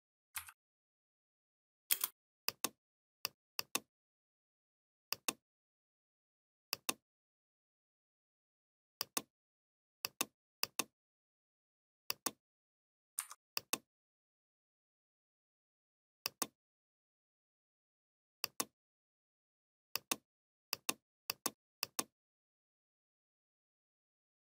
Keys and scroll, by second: 0.0 ctrl+z, 1.7 space.